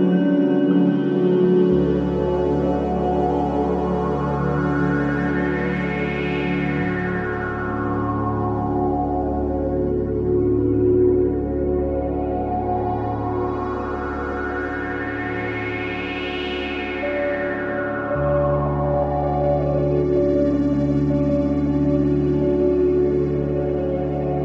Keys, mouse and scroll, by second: 0.1 Return, 0.8 click, 3.8-4.2 scroll up 1, 4.2 click, 4.8-5.5 scroll up 1, 5.5 click, 7.5-8.0 scroll down 1, 10.2-16.1 drag, 16.5-17.4 scroll down 1, 17.2-18.8 typing, 19.0 Return, 19.3-19.6 scroll down 1, 20.1 click.